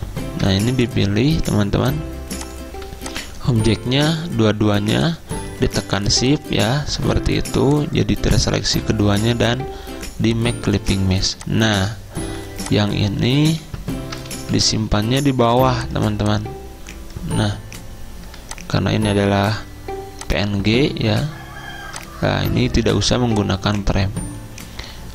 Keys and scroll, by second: 8.6 ctrl+z, 12.3 c, 13.7 ctrl+z, 14.4 ctrl+shift+z, 15.0 v.